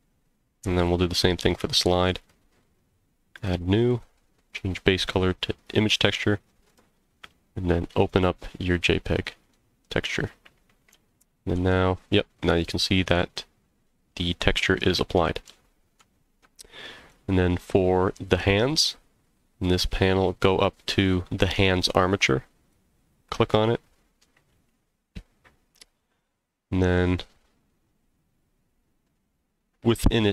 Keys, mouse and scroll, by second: 0.7 click, 2.2 click, 3.3 click, 4.5-5.7 drag, 6.7 click, 10.9 z, 12.1 scroll up 1, 12.6-14.8 middle drag, 15.0 scroll down 2, 15.4 z, 16.3 scroll down 1, 16.8 middle click, 17.3 click, 18.9-20.0 scroll up 6, 22.6 click, 24.7 scroll down 1.